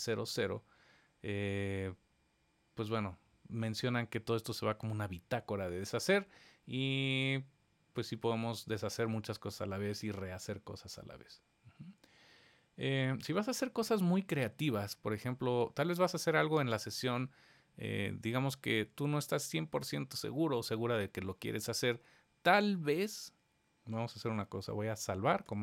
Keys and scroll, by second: 25.4 super+s.